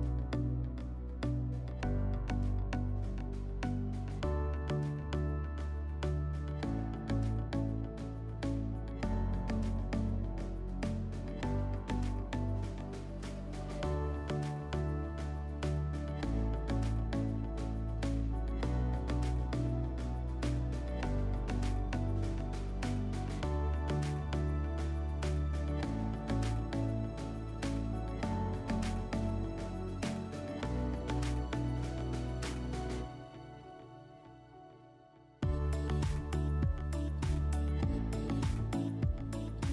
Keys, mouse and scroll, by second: 0.4 click, 1.6 click, 2.7 alt+w, 7.9 click, 9.4 click, 10.8 click, 12.5 click, 15.7 click, 18.3 click, 20.1 click, 21.6 click, 22.3 click, 22.9 click, 24.7 click, 25.5 click, 26.3 alt+w, 27.8 s, 29.0 click, 30.4 click, 31.9 click, 35.2 click, 36.7 click, 37.6 alt+w, 39.0 alt+w.